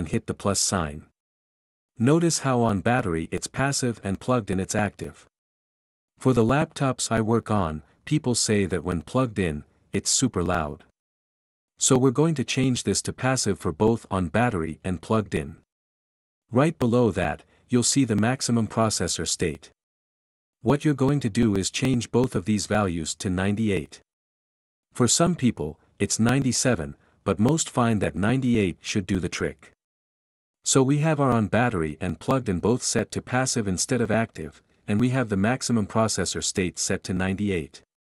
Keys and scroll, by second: 32.8-33.7 typing, 36.8-37.8 typing.